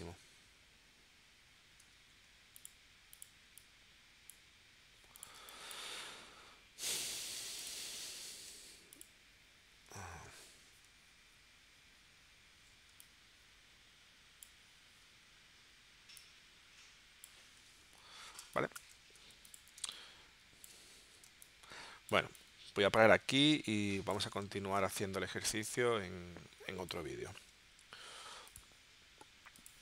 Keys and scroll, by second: 1.8 a, 5.4 space, 7.3 w, 8.5 v, 10.1 shift+w, 18.4 space, 19.3 v, 19.8 space, 21.2 space, 24.8 space.